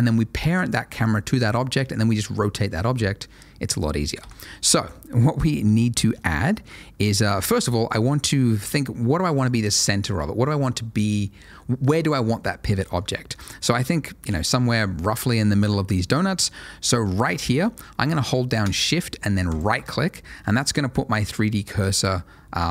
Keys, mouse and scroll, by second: 1.7 ctrl+shift+a, 4.2 Escape, 5.1-5.7 scroll up 1, 5.7 middle click, 6.1 scroll up 1, 6.5 shift+middle click, 6.8 shift+middle click, 7.5-8.0 scroll up 1, 8.0 middle click, 13.1 shift+middle click, 13.4 shift+scroll up 1, 14.9 middle click, 19.8 shift+right click, 20.0 middle click, 21.7 middle click.